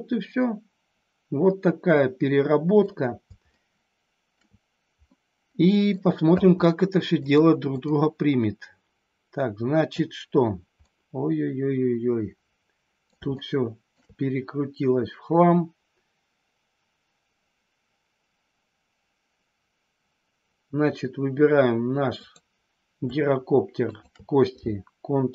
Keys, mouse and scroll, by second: 2.8 scroll down 1, 3.4 scroll up 1, 3.6 shift+middle click, 5.0 scroll up 1, 5.2 middle click, 5.8 scroll down 1, 7.2 click, 10.8-13.1 middle drag, 13.4 shift+middle click, 22.2 click.